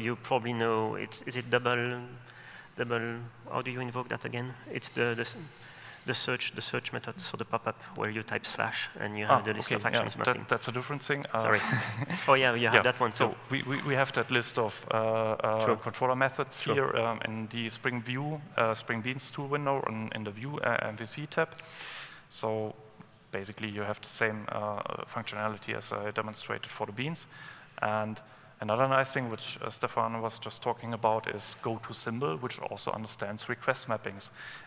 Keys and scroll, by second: 27.8 ctrl+alt+super+o.